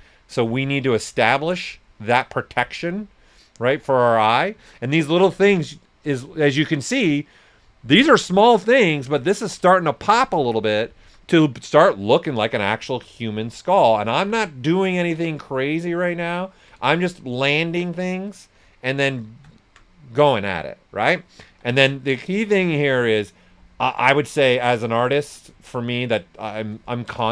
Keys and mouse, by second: 4.0 right click, 10.4 right click, 11.0 s, 11.1-12.5 drag, 18.4 right click, 18.9 alt+right click, 19.5 alt+right click, 21.4 s, 21.5 click, 23.9 right click, 24.4 click, 26.9 ctrl+right click.